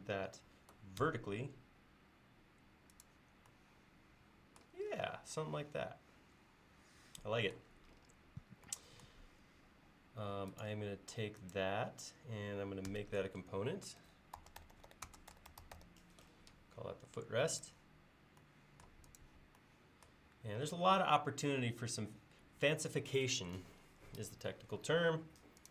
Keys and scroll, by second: 1.1 Page_Up, 12.9 g, 14.2-16.3 typing.